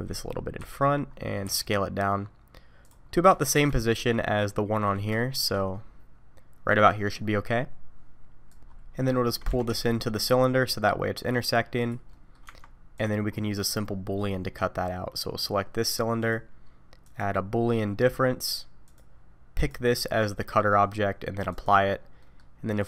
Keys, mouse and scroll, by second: 0.6 KP_3, 1.2 scroll up 1, 1.4 s, 3.0-3.4 scroll up 2, 3.5 scroll down 3, 3.8 shift+middle click, 4.8-5.2 scroll up 2, 5.2 shift+middle click, 5.6 scroll up 1, 8.6 middle click, 8.6 scroll down 4, 9.1 shift+middle click, 9.5 g, 12.1 middle click, 12.4 Tab, 12.9 click, 13.3-15.1 scroll up 1, 15.1-15.5 scroll up 1, 16.2 click, 18.8 click, 20.0 middle click, 21.5 click, 22.2 middle click.